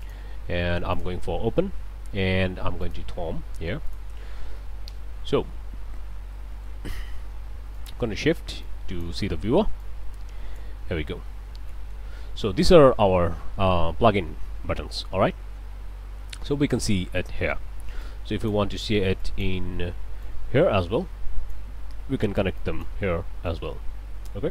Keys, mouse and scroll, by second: 0.0 click, 0.9 click, 2.8 click, 3.9 click, 4.2 a, 5.0 KP_Enter, 5.9 scroll down 1, 6.3 click, 7.7 ctrl+shift+click, 8.6 ctrl+shift+click, 9.8 click, 10.9-11.6 scroll down 2, 11.7 click, 15.3-15.8 scroll up 1, 15.9 scroll down 1, 16.2 click, 18.0 click, 19.2 click, 20.2-21.7 drag, 22.6 click, 23.4-24.5 drag.